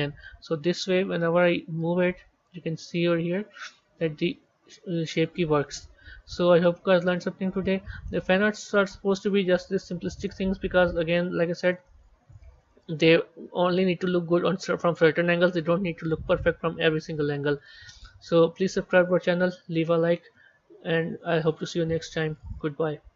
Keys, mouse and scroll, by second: 1.5-4.5 drag, 10.2 z, 11.0-11.8 middle drag, 11.8-12.5 scroll down 4, 12.9 scroll down 2, 13.7-16.7 middle drag, 17.9-18.2 scroll up 4.